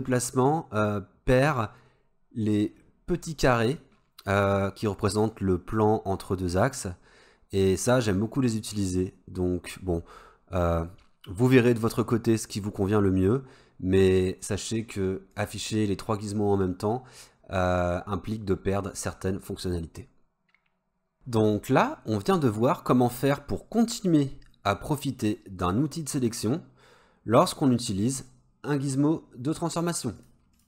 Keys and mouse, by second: 15.4 click, 25.4-27.9 drag.